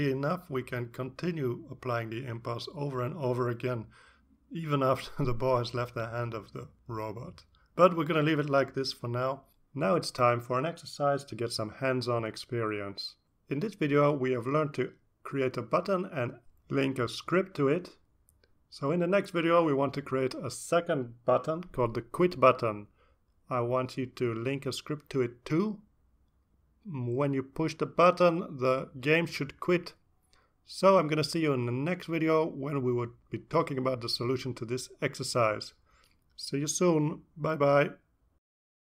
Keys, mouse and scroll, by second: 1.2 click, 4.0 click, 4.8 click, 5.6 click, 6.7 click, 7.5 click, 8.1 click, 12.0 click, 16.0 click, 18.3 click.